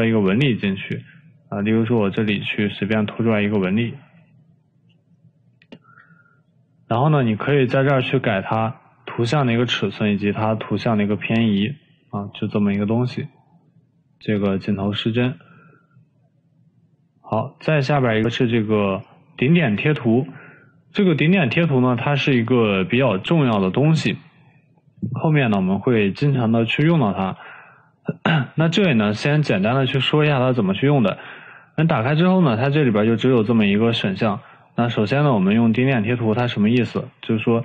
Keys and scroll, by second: 23.9 Delete.